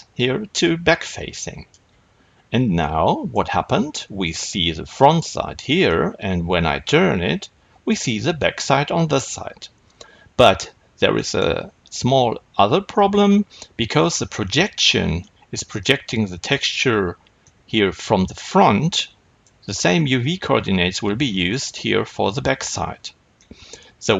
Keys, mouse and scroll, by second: 2.7-24.1 middle drag, 10.3-11.1 scroll down 2.